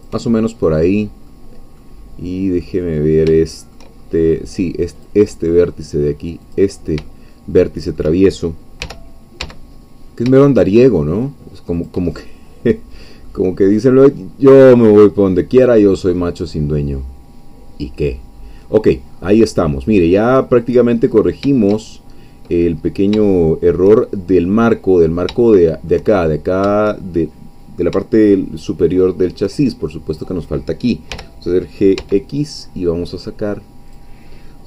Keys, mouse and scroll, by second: 0.3 shift+middle click, 1.0-1.3 scroll down 2, 1.3 middle click, 2.0 scroll down 2, 2.6 middle click, 3.4 shift+middle click, 4.0-4.4 shift+scroll up 2, 5.0 click, 5.4 middle click, 6.5 click, 7.3-8.5 shift+middle drag, 8.8 g, 11.8 shift+click, 12.1 shift+middle click, 12.9 scroll down 1, 13.3 middle click, 14.2 scroll down 1, 14.5 middle click, 15.2-15.7 scroll up 1, 15.8-16.4 scroll up 2, 16.4-17.7 scroll down 1, 18.1-18.6 scroll down 1, 18.6 middle click, 19.4-19.9 scroll down 1, 20.3 middle click, 21.0-21.4 scroll up 1, 21.8 shift+scroll down 1, 22.5-24.3 middle drag, 24.5-25.3 scroll up 1, 25.4-26.5 shift+middle drag, 28.1-29.6 shift+middle drag, 30.1 click, 31.1 g, 32.0 x, 33.9-34.6 drag.